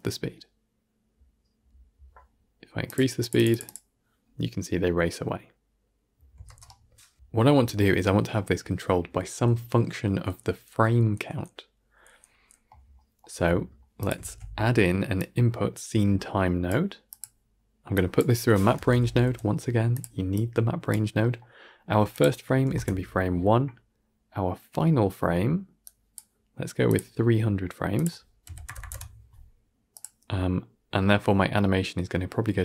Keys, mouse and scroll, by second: 2.8-6.5 drag, 6.5 shift+space, 7.1 shift+Left, 13.9-16.6 drag, 16.6 shift+a, 18.1 click, 22.6-32.6 drag.